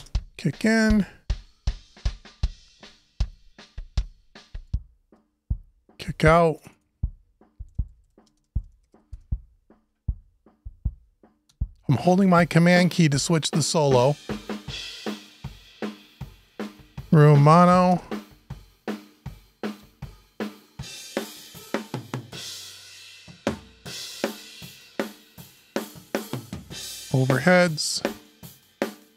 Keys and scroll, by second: 8.9 shift+Return, 17.7 Return, 26.2 Return.